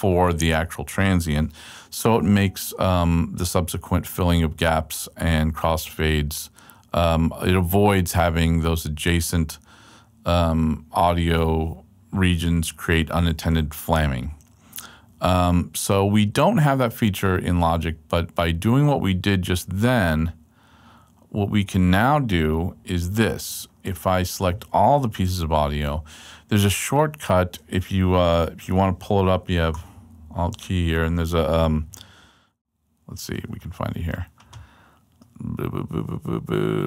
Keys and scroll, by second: 4.3 super+Right, 14.7 super+Left, 16.0 super+Left, 17.2 super+Left, 17.5 super+Right, 19.1 super+Right, 21.3 super+Left, 25.7 super+a, 29.7 alt+k, 32.6 n.